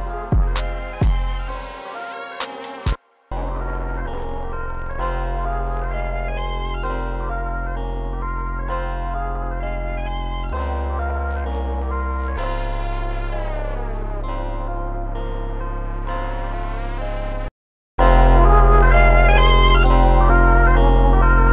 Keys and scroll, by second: 1.5 super+s, 2.9 super+s, 14.3 super+s, 14.7 4, 15.8-17.9 typing, 19.6 Escape.